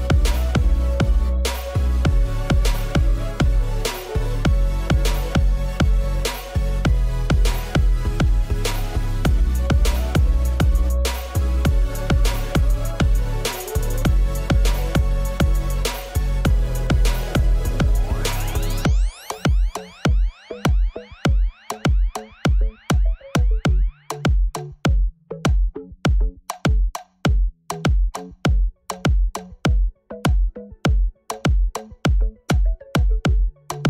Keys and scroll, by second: 3.6 Caps_Lock, 3.9 Tab, 7.6 alt+z, 12.5 Tab, 16.4 ctrl+z, 16.7 ctrl+z, 23.6 Tab, 24.7 alt+z, 27.3 w, 32.3 Tab.